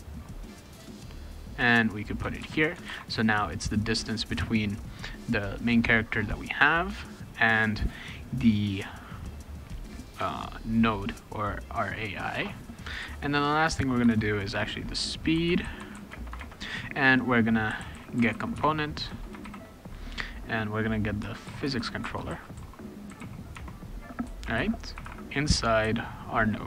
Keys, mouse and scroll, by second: 2.0 click, 2.4 ctrl+v, 2.9 ctrl+s, 10.7 click, 10.9 click, 11.9 click, 13.0 ,, 14.0 Return, 15.1-19.4 typing, 21.2-23.7 typing, 24.7-25.5 typing.